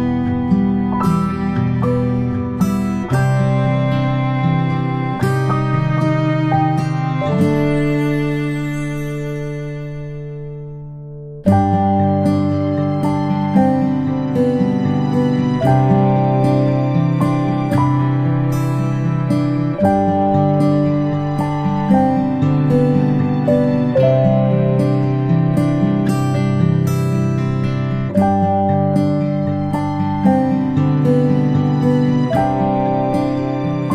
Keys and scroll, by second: 1.0 p, 5.7 space, 7.9-11.6 space, 15.5 space, 18.1-20.6 typing, 22.4-33.9 space.